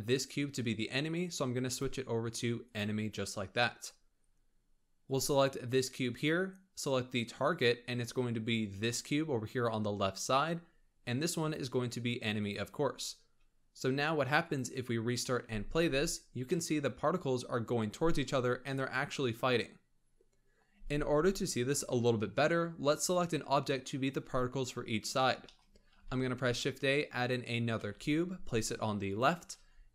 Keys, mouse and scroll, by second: 1.6-4.6 drag, 5.0 click, 7.4 click, 11.3-15.0 drag, 15.0 scroll down 2, 15.2 middle drag, 15.4 space, 16.0-16.4 scroll up 1, 16.4-20.7 middle drag, 20.7 space, 21.8 KP_1, 25.4-25.9 shift+middle drag, 25.9 shift+a, 27.7 g.